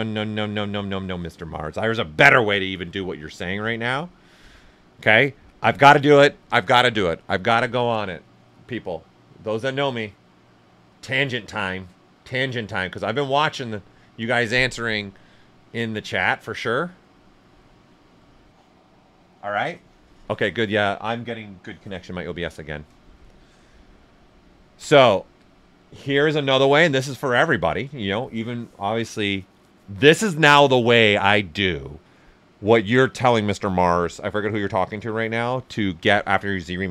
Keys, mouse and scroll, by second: 20.3-23.5 drag, 23.5 alt+right click, 28.4 ,.